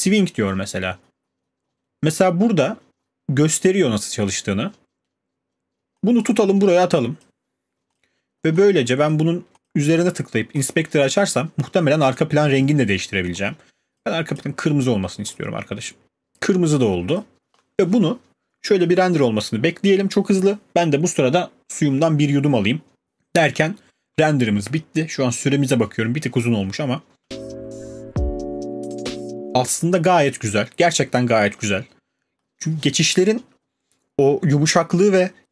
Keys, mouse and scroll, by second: 7.2 click, 8.0 click, 8.6 click, 9.1 click, 9.6 click, 10.6 click, 12.1 click, 14.1 click, 14.4 click, 15.3 click, 17.6 click, 29.6 space, 32.4-34.6 scroll.